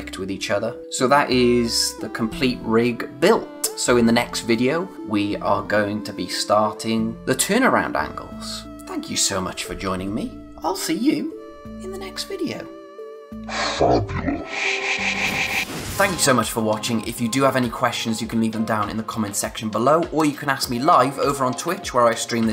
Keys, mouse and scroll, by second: 13.4 space.